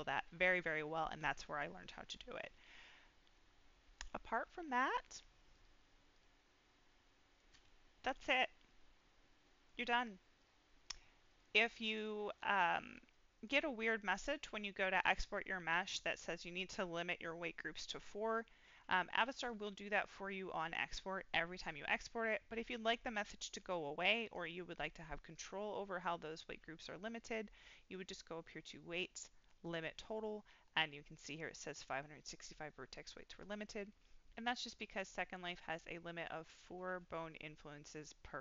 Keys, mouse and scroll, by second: 2.8-3.9 scroll down 3, 3.3 middle click, 5.5 click, 6.6-7.3 middle drag, 8.6-9.8 middle drag, 10.3 click, 11.2-12.7 drag, 13.1 middle click, 13.6-14.0 scroll up 2, 14.0 middle click, 15.7 middle click, 19.4 click, 24.2 click, 25.3-26.2 drag, 28.4-29.8 drag, 33.6-34.7 middle drag, 35.5 middle click, 37.6-38.4 scroll up 1.